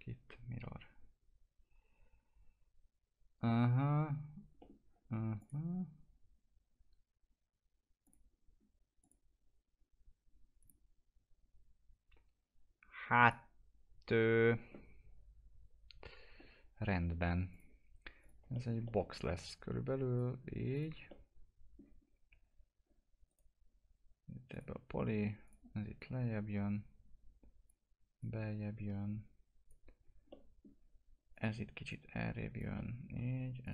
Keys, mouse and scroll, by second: 1.5 Return, 4.5 middle click, 5.3 click, 13.2 click, 17.5 click, 18.7 middle click, 19.4 click, 21.0 alt+middle click, 22.0 scroll up 1, 22.2 2, 23.2 right click, 24.5 click, 25.0 2, 25.4-30.3 drag, 30.3 alt+middle click, 31.3 click, 32.7 alt+middle click, 33.6-33.7 drag.